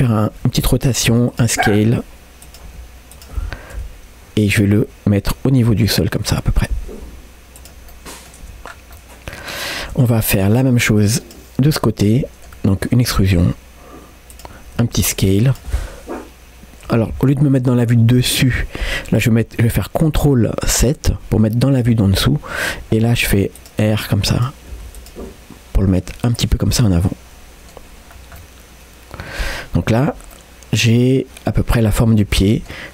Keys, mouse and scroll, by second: 0.4 r, 1.7 s, 4.7 g, 6.3-6.8 scroll down 1, 7.0 g, 7.9 middle click, 8.5 Tab, 8.7 scroll down 1, 9.0 middle click, 9.9 Tab, 10.1 middle click, 11.0 click, 11.7 scroll up 1, 11.9 middle click, 13.2 e, 14.8 s, 21.2 ctrl+KP_7, 22.8 g, 23.8 r, 26.6 scroll down 1, 26.9-27.9 middle drag, 28.1 scroll down 1, 28.4-29.4 middle drag, 30.0 Tab, 30.3 middle click, 31.9-32.3 scroll up 2, 32.3 Tab, 32.4 middle click.